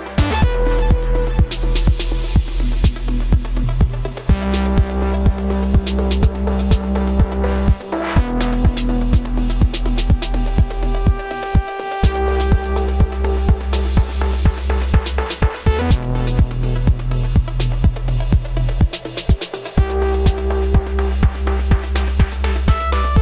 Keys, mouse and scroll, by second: 2.6 right click, 4.3 right click, 7.8 ctrl+t, 10.5 alt+shift+click.